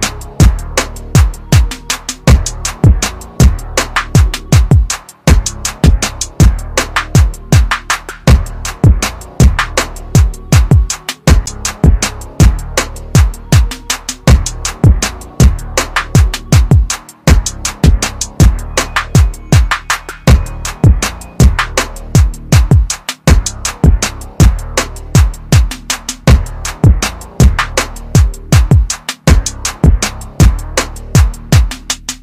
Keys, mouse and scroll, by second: 1.3 click, 9.6 right click, 12.4 click, 19.9 click, 27.0 click, 29.9 ctrl+z, 31.5 click.